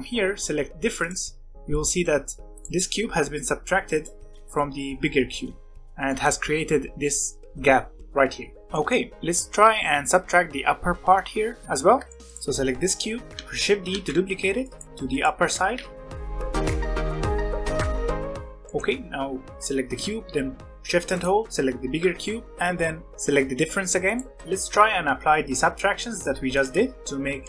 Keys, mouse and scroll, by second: 0.9-1.7 drag, 1.7-2.4 middle drag, 2.4 alt+a, 2.5 click, 3.9 click, 4.5-5.8 middle drag, 5.8 alt+a, 6.0-8.0 middle drag, 8.7-12.2 middle drag, 12.2 click, 12.8 scroll down 1, 12.9-13.4 middle drag, 13.4 shift+scroll down 1, 13.6 shift+d, 14.8 g, 15.5 g, 16.4 g, 16.8 middle click, 17.0 scroll up 1, 17.2 middle click, 17.3 s, 18.0-21.0 middle drag, 21.0 shift+click, 24.0 click, 24.3-26.0 scroll up 1, 26.0-26.5 middle drag, 26.5 click, 26.9-27.4 middle drag.